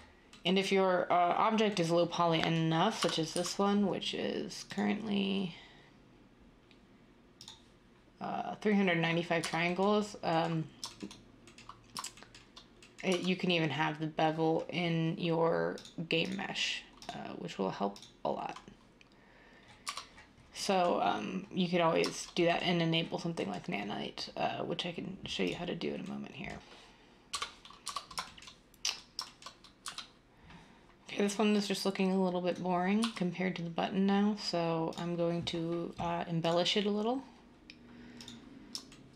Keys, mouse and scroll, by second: 2.9 Tab, 3.3 typing, 9.4 Tab, 13.1 Tab, 19.8 Tab, 27.8 Tab, 29.8 z, 33.0 x.